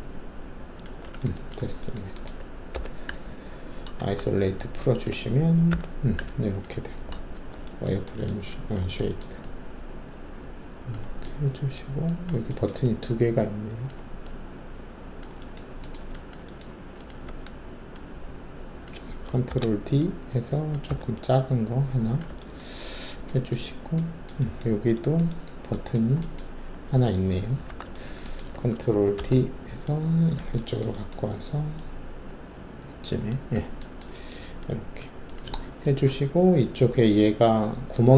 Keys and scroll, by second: 1.5 ctrl+alt+`, 2.7 4, 4.0 alt+shift+a, 5.7 5, 7.3 alt+shift+w, 17.2 w, 19.4 ctrl+d, 20.8 r, 27.6 alt+w, 29.1 ctrl+d.